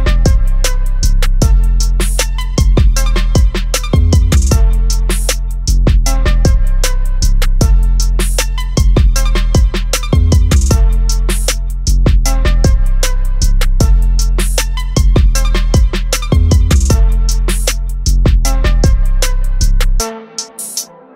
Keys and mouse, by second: 1.2 ctrl+z, 2.6 ctrl+alt+z, 4.2 click, 6.6 click, 15.4 click, 18.7 click.